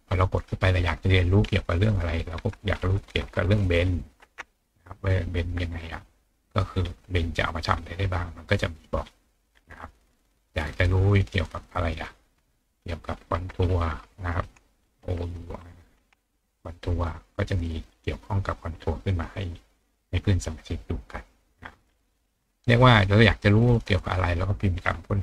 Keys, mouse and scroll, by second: 6.8 scroll down 1, 7.7-8.4 scroll down 2, 8.4-8.7 scroll down 1, 9.0 scroll down 2, 9.5 scroll up 2, 10.8 click, 17.9-18.8 scroll down 3, 18.3 middle click, 19.5-20.1 scroll down 1, 20.1 middle click, 20.1-20.5 scroll down 1, 21.8-22.5 scroll up 4, 23.4 click.